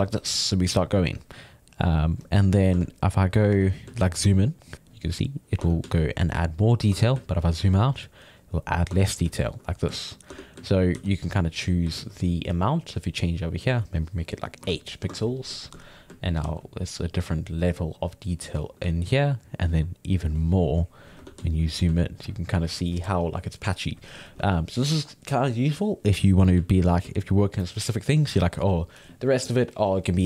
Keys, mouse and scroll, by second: 0.7 middle click, 1.2-2.8 drag, 2.8 Tab, 3.3 middle click, 3.6 Tab, 3.6-4.7 ctrl+middle drag, 4.7 click, 5.6 Tab, 5.9-7.0 ctrl+middle drag, 7.0 Tab, 7.3 ctrl+middle click, 7.8-8.9 drag, 8.9 Tab, 9.0-10.9 ctrl+middle drag, 10.9 f, 11.2 ctrl+click, 12.0 ctrl+z, 12.7-15.6 drag, 15.6 ctrl+middle click, 16.4 f, 16.8 click, 17.6 middle click, 17.9 click, 18.6-20.3 ctrl+middle drag, 20.3 click, 21.3 Tab, 21.4-24.4 ctrl+middle drag, 24.4 Tab, 26.3 ctrl+middle click, 27.0 f, 28.3-30.2 drag.